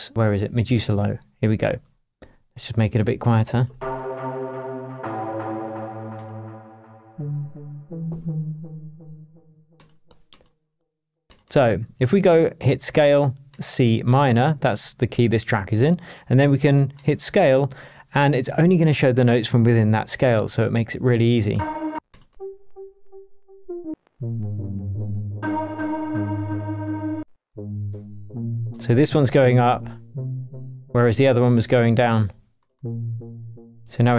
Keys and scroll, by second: 21.5 space, 23.5 Down, 23.9 space, 24.1 Down, 24.9 Up, 25.3 space, 27.1 space.